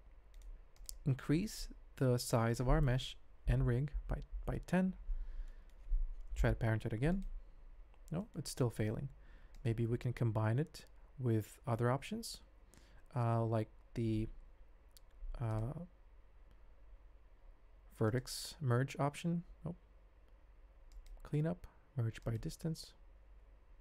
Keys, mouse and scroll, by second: 1.6-2.0 drag, 2.2 shift+middle click, 2.3 shift+drag, 2.9 s, 5.4-5.7 drag, 6.3 ctrl+p, 8.4 click, 9.5 click, 12.0 ctrl+z, 12.4 ctrl+z, 13.1 ctrl+z, 14.6 ctrl+shift+z, 15.4 click, 16.0 Tab, 17.3 a, 18.0-22.4 drag.